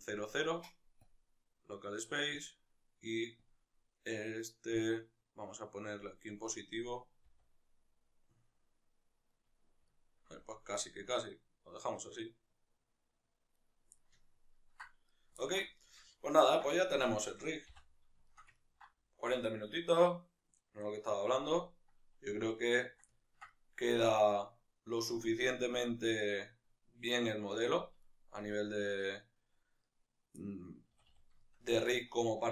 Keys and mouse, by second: 2.3-3.3 drag, 4.7-9.2 drag, 7.1 r, 9.2 right click, 9.6-13.4 ctrl+middle drag, 10.2 r, 13.4 right click, 13.7-14.8 ctrl+middle drag, 14.8 right click, 15.1-27.8 ctrl+middle drag, 17.4 n, 27.8-29.7 right drag, 30.1-32.5 middle drag, 30.7 a.